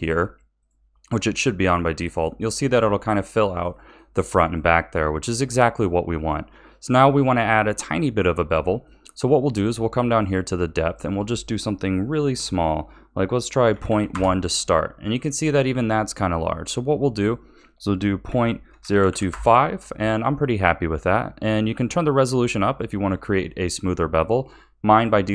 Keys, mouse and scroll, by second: 1.9-6.6 middle drag, 6.6-8.8 scroll down 2, 8.8-10.8 shift+middle drag, 10.8-13.8 drag, 17.1-20.1 drag.